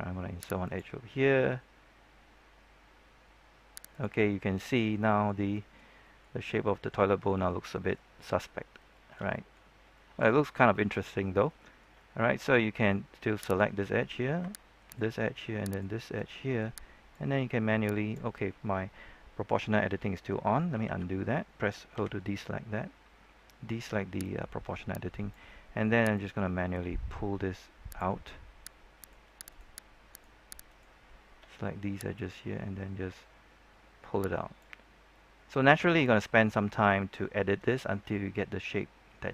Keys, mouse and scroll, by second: 0.6 click, 4.1 middle click, 7.0 shift+middle click, 8.6 scroll up 1, 8.9 shift+middle click, 10.5 scroll down 1, 10.7 shift+middle click, 11.2 scroll up 1, 11.5 shift+middle click, 13.4 right click, 14.8 shift+right click, 16.2 middle click, 17.1-19.0 drag, 20.8 ctrl+z, 21.9 o, 24.1-28.1 drag, 28.2-28.9 scroll down 1, 28.9 right click, 29.4 shift+right click, 30.0 shift+right click, 30.6 shift+right click, 31.4-32.1 scroll up 1, 32.1-34.9 drag, 34.9 scroll down 1, 35.0 middle click, 35.8-36.1 scroll down 1, 36.1 middle click, 36.6 shift+middle click, 37.3 scroll up 1, 37.6 shift+middle click, 38.2-38.6 scroll up 1, 38.6-39.3 scroll down 1.